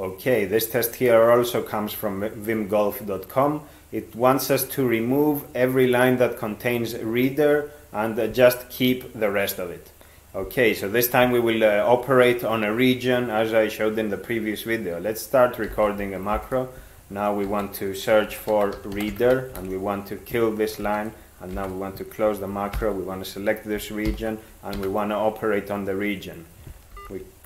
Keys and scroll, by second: 15.7 ctrl+x, 16.4 (, 17.5 ctrl+s, 17.9-19.6 typing, 20.8 ctrl+x, 21.6 ), 22.8 alt+h, 23.8 ctrl+x, 24.1 ctrl+k, 24.8 r, 27.0 ctrl+g.